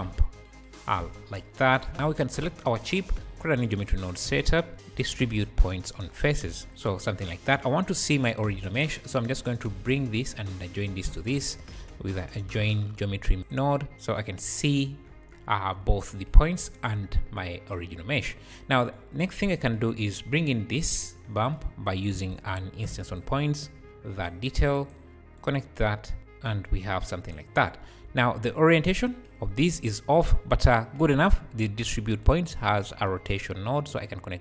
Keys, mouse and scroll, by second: 0.9 `, 1.8 s, 2.0 click, 2.5 `, 3.2-4.2 drag, 4.0 scroll up 3, 4.2 a, 4.7-6.7 drag, 4.7 shift+a, 11.1 shift+a, 13.9 click, 15.1 scroll up 1, 15.3 `, 16.5 scroll up 3, 16.7 `, 17.5-18.3 scroll down 5, 18.3 click, 20.1-21.0 scroll down 2, 21.0-21.4 scroll down 1, 21.9 click, 22.1 shift+a, 22.9 shift+a, 23.8 click, 24.8-29.2 drag, 28.0 `, 29.4-29.7 scroll up 2, 33.4-34.4 drag.